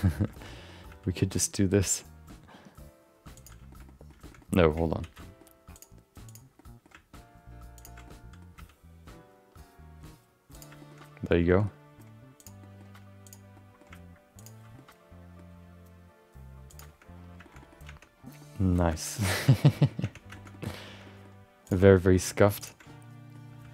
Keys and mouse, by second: 0.3 shift+middle click, 0.5 middle click, 0.8 g, 3.7 middle click, 3.8 middle click, 4.2 shift+middle click, 4.4 middle click, 5.0 ctrl+z, 5.2 middle click, 5.7 click, 6.2 click, 6.5 middle click, 8.0 middle click, 8.5 g, 10.8 middle click, 10.9 middle click, 11.4 middle click, 11.6 middle click, 12.4 click, 12.6 middle click, 13.2 click, 13.5 middle click, 14.3 ctrl+shift+click, 14.8 middle click, 15.5 g, 17.4 shift+middle click, 17.6 middle click, 18.1 Tab, 18.4 middle click, 19.1 middle click, 19.5 shift+middle click, 19.7 middle click, 20.0 Tab, 20.3 shift+middle click, 20.5 middle click, 21.0 middle click, 21.6 click, 21.9 middle click, 22.6 ctrl+shift+click, 22.8 middle click, 23.4 g.